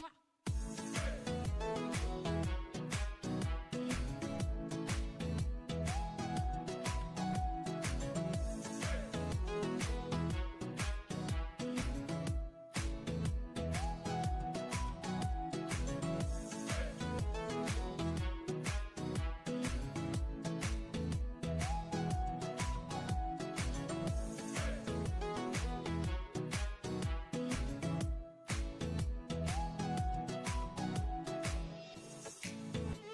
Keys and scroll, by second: 23.2 1, 30.9 0.